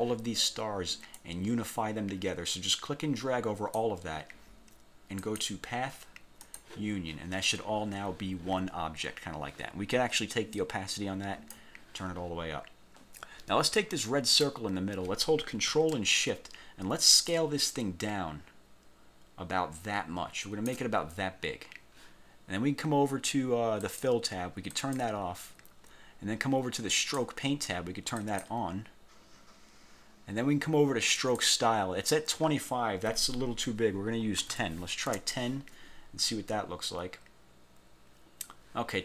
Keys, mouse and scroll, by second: 1.3-4.0 drag, 5.3 click, 6.5 click, 10.6 click, 14.4 click, 17.4 ctrl+shift+click, 24.0 click, 24.9 click, 27.1 click, 28.3 click, 31.3 click, 34.6 1, 35.2 Return.